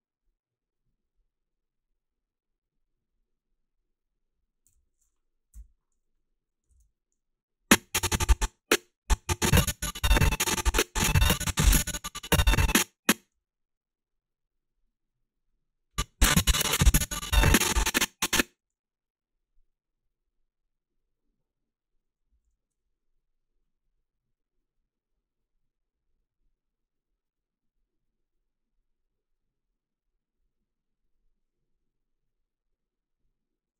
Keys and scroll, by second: 4.7 f, 5.5 f, 13.3 s, 18.6 s, 22.3 a.